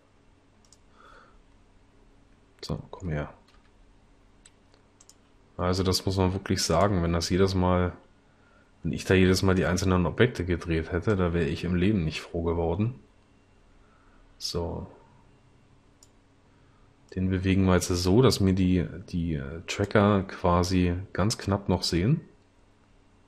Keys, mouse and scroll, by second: 3.6 g.